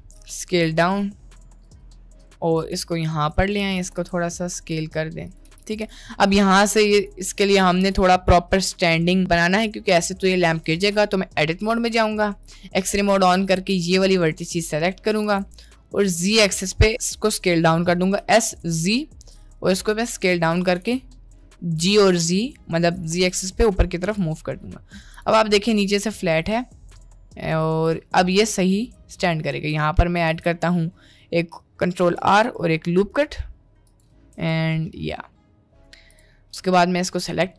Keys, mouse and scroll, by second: 0.2 d, 0.7 s, 2.6 g, 4.0 d, 4.6 s, 5.5 g, 10.8 Tab, 12.7 click, 15.3 s, 20.8 g, 23.2 Tab, 25.2 click, 26.5-27.5 middle drag, 27.8 Tab, 28.1 middle click, 29.6 ctrl+t, 30.3 ctrl+z, 32.2 ctrl+r, 34.4 Tab, 34.7 middle click.